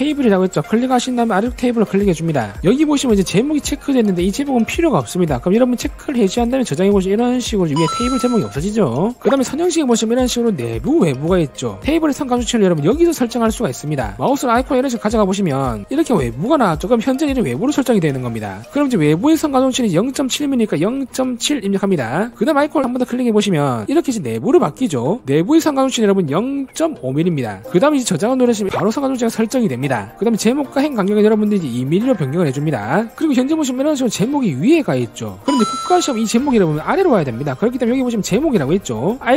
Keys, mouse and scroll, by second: 0.4 click, 1.2 click, 2.2 click, 6.6 click, 7.6 click, 20.0 click, 26.0 click, 27.5 5, 31.9 click, 32.3 2, 32.6 click, 33.0 2.